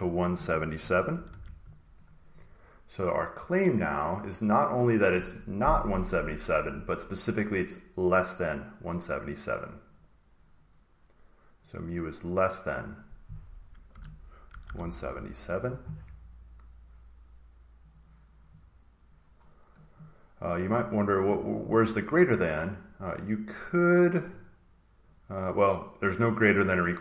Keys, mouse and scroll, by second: 0.3-2.3 typing, 6.6 click, 8.0 click, 10.1 click, 10.2-11.6 drag, 12.9 click, 13.8-14.4 typing, 15.0 click, 17.8 click, 18.4 click, 19.4-19.9 scroll down 2, 23.0-25.1 drag.